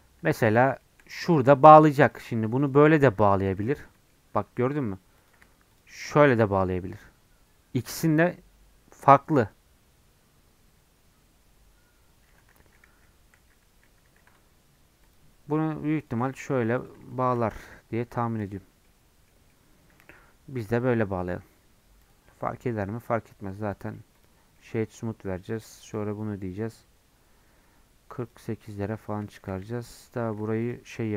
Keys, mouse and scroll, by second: 0.0 scroll up 2, 0.5 middle click, 1.3-2.1 scroll up 1, 2.1 click, 3.0 j, 4.0-5.3 middle drag, 5.3 click, 6.3 j, 7.0 Tab, 12.6 ctrl+z, 12.9 ctrl+z, 13.4 ctrl+z, 13.7 ctrl+z, 15.2 click, 16.5 j, 16.9 click, 18.0 j, 18.4 Tab, 18.7 scroll down 3, 18.9-20.2 middle drag, 20.2 scroll up 2, 20.6 Tab, 20.9 scroll down 1, 21.2 middle click, 21.6 Tab, 22.0 click, 22.3 middle click, 22.7 scroll down 2, 22.8 middle click, 23.2 scroll up 1, 23.3 middle click, 23.7 click, 24.3 right click, 24.6-25.9 middle drag, 25.9-28.7 drag, 28.7 middle click, 29.0-29.6 scroll up 2, 29.3 shift+middle click, 29.6 Tab, 29.9 middle click, 30.1 scroll up 1, 30.7 alt+click.